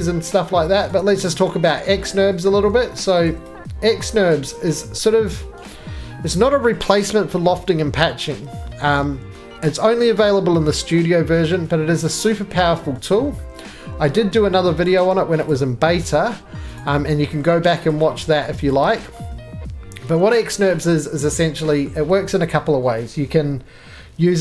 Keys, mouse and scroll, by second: 9.1 shift+middle click, 9.1 shift+scroll down 1, 9.3 middle click, 9.3-10.1 shift+scroll down 3, 10.1 scroll down 2, 12.1 middle click, 12.2-12.5 scroll down 4, 12.5-13.0 scroll, 13.0 shift+middle click, 13.1 shift+scroll, 13.7 middle click, 13.8-14.4 scroll, 14.4 3, 14.9 click, 21.1 shift+click, 21.1 middle click, 21.1-22.7 scroll, 21.9-24.4 shift+middle click, 22.7 middle click, 24.2 x.